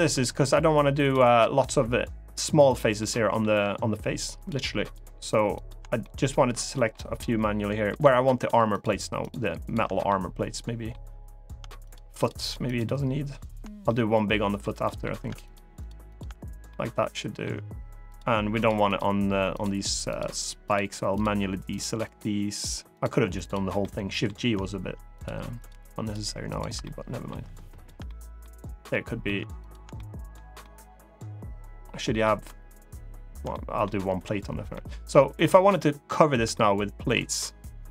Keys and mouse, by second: 2.7 middle click, 4.1 shift+click, 4.6 shift+click, 5.7 middle click, 6.9 middle click, 8.1 shift+click, 8.4 shift+click, 8.9 shift+click, 9.4 shift+click, 9.8 middle click, 11.6-13.3 shift+drag, 13.6 middle click, 14.6 middle click, 15.2 shift+click, 16.4 middle click, 18.3 shift+click, 18.6 shift+click, 19.3 shift+click, 19.8 shift+click, 20.9-21.9 shift+drag, 22.3 shift+click, 22.7 shift+click, 23.5 middle click, 24.9 shift+click, 26.2 shift+click, 26.6 middle click, 27.5 shift+click, 27.8 middle click, 28.6 middle click, 29.3 shift+click, 29.7 middle click, 30.3-31.9 middle drag, 33.2 middle click, 34.5 middle click, 36.3 middle click.